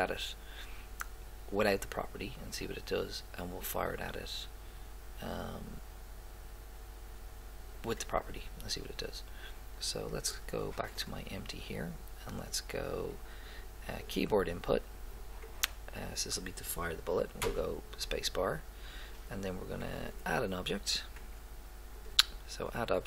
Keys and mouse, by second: 11.0 right click, 11.3 right click, 16.1-18.0 drag, 18.3 middle click, 20.0-22.0 drag.